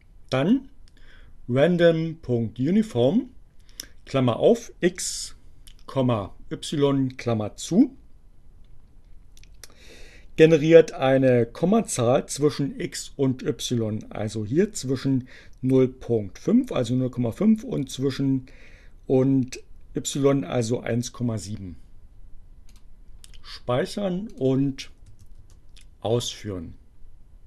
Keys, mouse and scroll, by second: 22.7 click, 24.3 click, 24.9 Up, 25.5 Return.